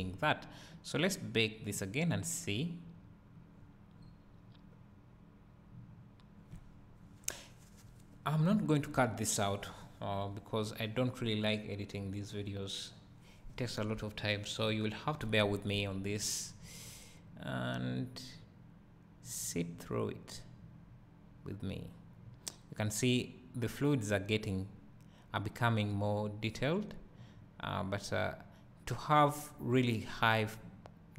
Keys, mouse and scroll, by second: 3.6 scroll down 1, 4.0 scroll up 1, 17.8-31.1 right drag.